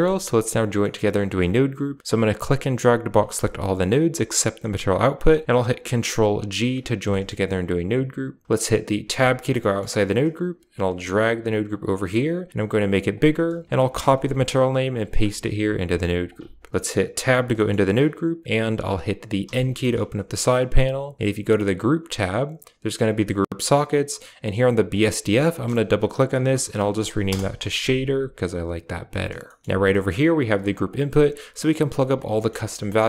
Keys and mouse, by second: 0.2 click, 0.7 middle click, 2.3-4.9 drag, 5.2 middle click, 6.5 ctrl+g, 7.0 middle click, 9.0 Tab, 9.5 middle click, 10.8 g, 11.9 middle click, 12.5 click, 13.1 drag, 13.9 ctrl+click, 14.8 ctrl+drag, 15.8 click, 16.2 click, 16.7 middle click, 17.1 Tab, 17.5-17.8 middle drag, 18.8 click, 19.4 n, 20.5 click, 21.7 click, 24.6-27.3 drag, 29.3 middle click, 29.7 a, 30.2 right click, 30.4 g, 32.2 middle click, 32.6 g.